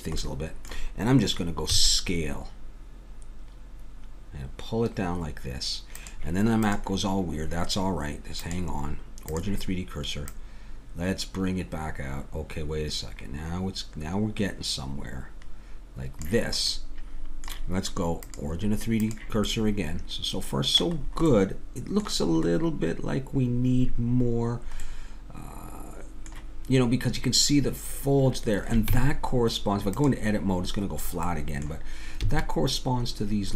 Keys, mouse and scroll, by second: 1.7 s, 6.7-10.2 drag, 10.3-13.3 drag, 16.8-18.2 middle drag, 18.2-20.3 drag, 19.7 middle click, 20.3 middle click, 24.4-26.9 middle drag, 28.9 Tab, 30.9 middle click, 32.2 a.